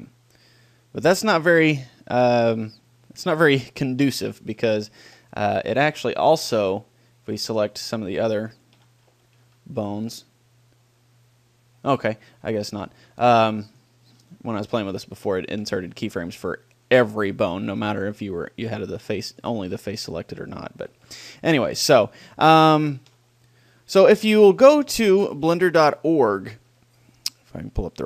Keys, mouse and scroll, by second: 3.6-4.6 drag, 4.6 middle click, 6.3-7.5 middle drag, 7.5-9.1 drag, 9.1 a, 9.4 a, 10.0 click, 10.4-12.7 middle drag, 13.8-15.2 right drag, 14.2 r, 15.3-16.9 drag, 15.3-16.5 middle drag, 19.3-22.3 drag, 21.1 a, 21.3 a, 22.5-24.3 middle drag.